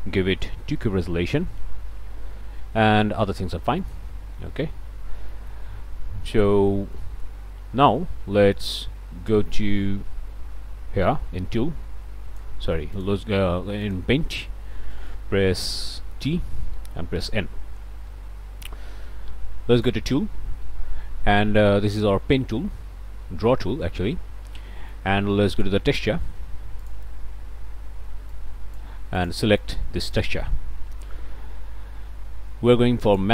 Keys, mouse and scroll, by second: 0.4 KP_Decimal, 0.8 KP_2, 1.6 KP_Enter, 2.2 ., 3.8 click, 4.5-4.8 scroll up 2, 5.1 scroll down 2, 5.3 middle click, 5.3 click, 7.0 right click, 11.0-12.6 drag, 12.9 click, 13.8 click, 14.9 click, 15.6 t, 17.1 n, 19.8 click, 21.9 click, 25.6 click, 26.8 click, 28.3 click, 29.2 click, 30.1 click, 33.0 click.